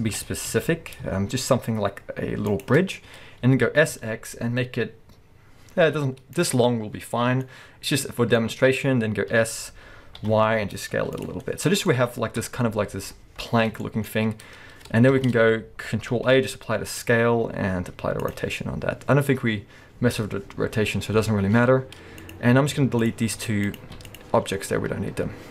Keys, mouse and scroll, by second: 0.1 g, 2.6 shift+click, 2.8-3.2 scroll down 1, 3.2-3.7 scroll up 1, 3.7 s, 6.5 click, 6.6-7.4 scroll down 1, 7.4-11.2 middle drag, 8.1 scroll up 1, 9.3 s, 11.2 click, 11.4-13.1 middle drag, 12.4 KP_1, 13.1-13.8 scroll up 1, 13.8-22.2 middle drag, 13.8-14.8 scroll up 2, 15.1 shift+Left, 16.3 ctrl+a, 21.1-22.2 scroll up 2, 22.2 click, 22.8 x, 23.7 click, 23.8 x, 24.6-25.1 scroll down 2, 25.1-25.5 scroll up 2.